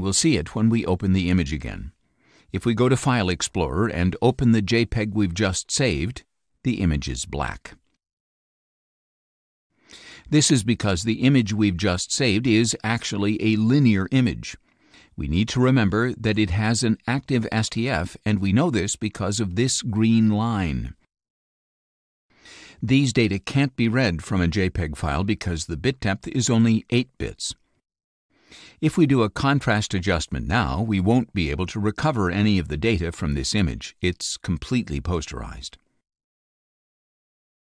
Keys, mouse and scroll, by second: 0.5 click, 4.5 click, 4.8-6.1 drag, 8.4-9.8 drag, 10.2-11.5 drag, 14.2 click, 24.6 click, 25.7-26.9 drag, 29.5 click, 33.1-33.6 scroll down 3, 34.1 space, 34.3-35.3 drag, 35.8 click.